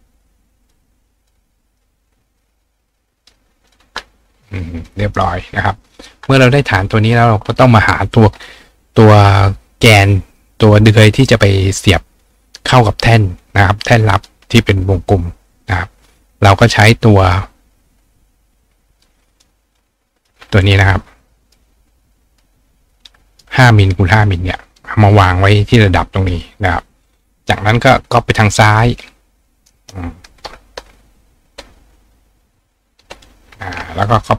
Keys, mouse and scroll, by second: 1.2 click, 1.2-5.2 right drag, 3.2 click, 3.7-4.9 drag, 17.3 click, 19.0 click, 19.8 click, 21.5 click, 22.3 click, 22.9 click, 23.2 right click, 25.1-26.3 drag, 28.5-29.7 ctrl+drag, 29.5 ctrl+right click, 34.0 click.